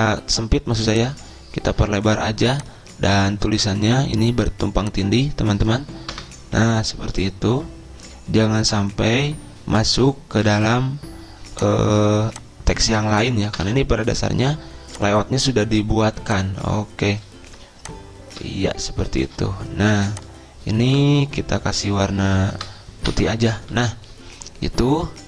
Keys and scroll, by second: 6.5 BackSpace, 7.4 Return, 11.0 shift+Right, 14.0 BackSpace, 21.4 BackSpace, 21.9 BackSpace, 22.4 BackSpace, 23.0 BackSpace, 23.4 Return.